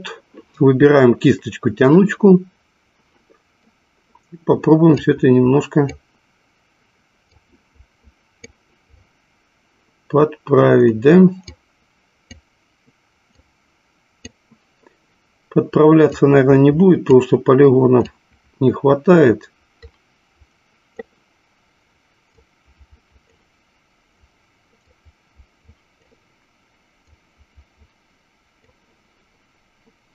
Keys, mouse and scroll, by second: 5.3-6.3 drag, 7.6 click, 11.6-12.9 drag, 13.9 click, 16.7 click, 18.2-20.9 drag, 22.6-23.8 drag, 25.3-26.5 drag, 27.8-29.0 drag.